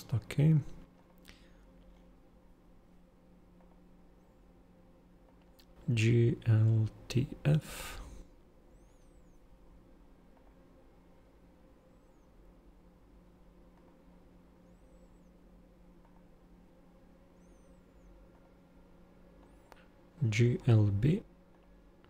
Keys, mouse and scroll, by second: 0.9 super+click, 3.6 super+click, 5.2 super+click, 19.4 super+click, 21.5 super+click.